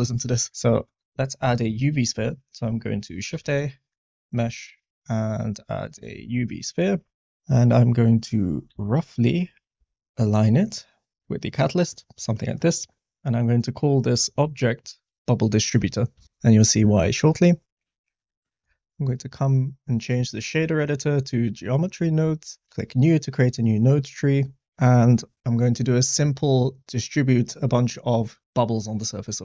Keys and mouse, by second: 0.9 middle click, 1.0 shift+a, 3.3 shift+a, 8.7 g, 8.8 z, 9.7 s, 11.2-11.9 middle drag, 12.3 middle click, 13.2-16.2 drag, 18.4 middle click, 19.4-21.5 drag, 22.7-23.5 drag, 23.5 middle click, 24.6 click.